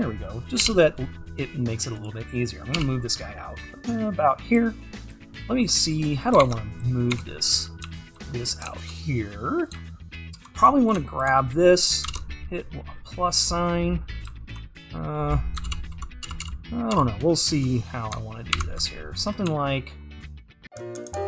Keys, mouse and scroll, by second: 0.7 g, 5.4-6.4 scroll up 2, 6.4-7.5 scroll up 1, 7.5-7.9 scroll up 1, 8.7-12.1 scroll up 2, 12.1 alt+click, 12.2 ctrl+KP_Add, 15.9 ctrl+KP_Add, 18.8 ctrl+KP_Subtract.